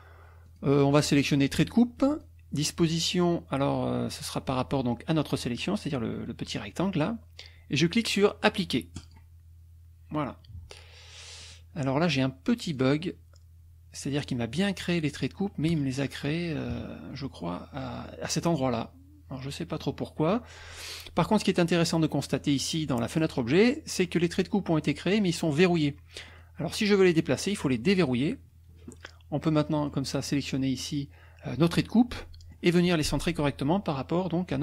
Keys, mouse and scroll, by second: 0.4 click, 0.9 click, 2.1 click, 4.5-5.5 drag, 9.0 click, 11.4 click, 12.6 click, 14.9 click, 15.7 KP_Subtract, 17.4 click, 18.4 click, 19.3 click, 22.4 click, 26.3 click, 28.0 click, 29.8 click, 30.2-31.0 drag, 32.1 middle click.